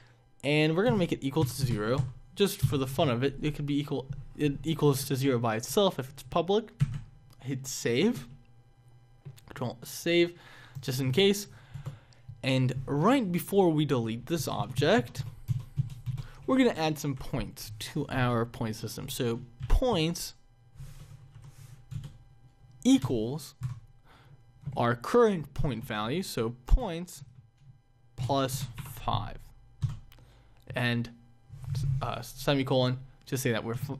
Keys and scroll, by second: 6.7 ctrl+s, 11.6 Return, 14.0 BackSpace, 17.0 Up, 19.3 Up, 21.2 Down, 21.8 Return, 26.6 Return.